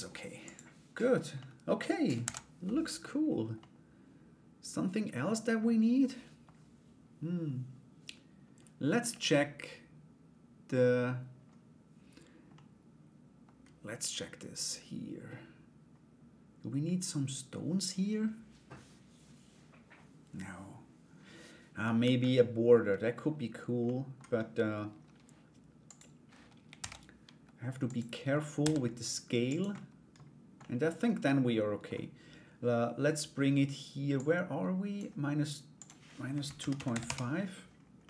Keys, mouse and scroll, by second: 0.0 click, 1.0 middle click, 1.8 ctrl+s, 2.2 middle click, 3.1-5.1 middle drag, 5.6 middle click, 8.7-10.4 middle drag, 12.1 middle click, 23.4 middle click, 25.4 click, 26.3 shift+a, 28.2 s, 29.3 middle click, 30.2-31.4 middle drag, 33.7 click, 35.3-37.1 drag, 37.6-38.0 middle drag.